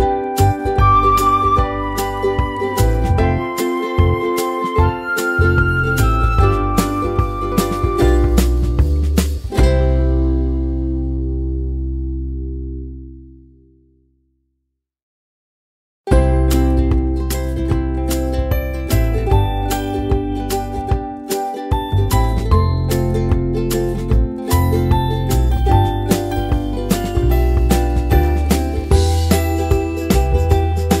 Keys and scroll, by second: 20.5-22.8 typing, 23.1 Return.